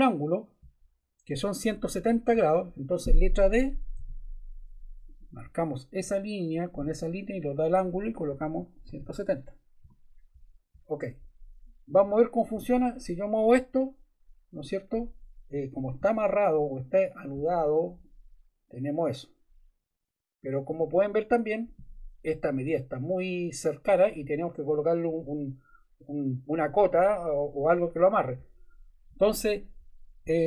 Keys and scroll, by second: 3.9 d, 8.2-9.5 typing, 9.8 Return, 12.0 Escape.